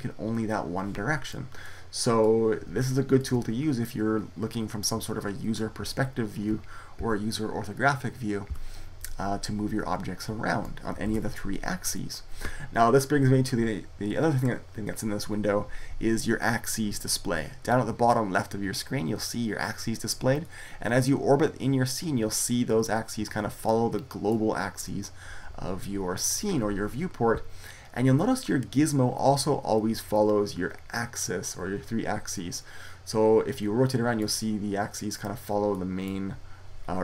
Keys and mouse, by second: 6.8 KP_5, 8.3 KP_5, 10.5 click, 10.9 ctrl+z, 20.3 middle click, 22.3-23.7 middle drag, 33.4 middle click, 35.9-37.0 middle drag.